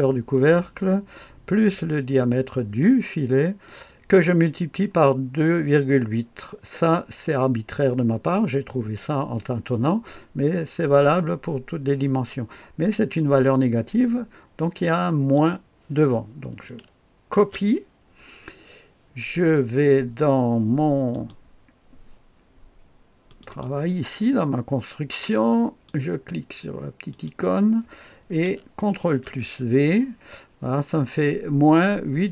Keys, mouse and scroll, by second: 9.0-15.4 drag, 17.4 ctrl+c, 21.1 click, 23.3 click, 25.2 click, 27.1 click, 29.0 ctrl+v.